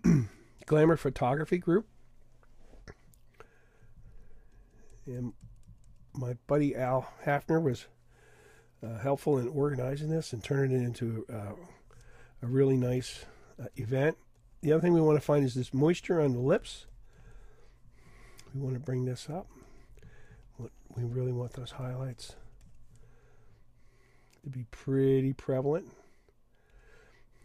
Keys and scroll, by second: 15.9 typing.